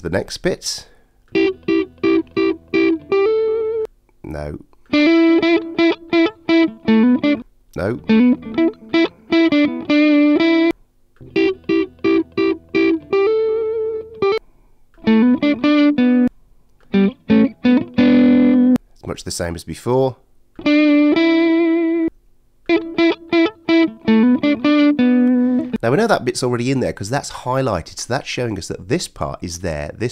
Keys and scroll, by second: 0.1 alt+super+space.